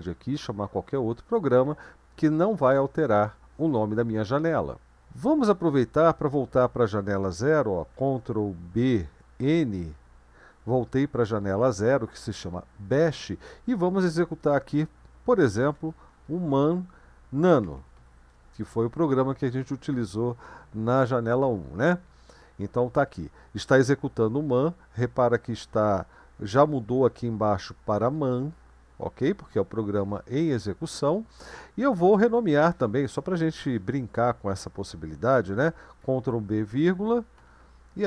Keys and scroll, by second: 8.9 ctrl+b, 9.8 n, 15.3-18.5 typing, 21.9 Return, 36.0 ctrl+b, 37.4 typing.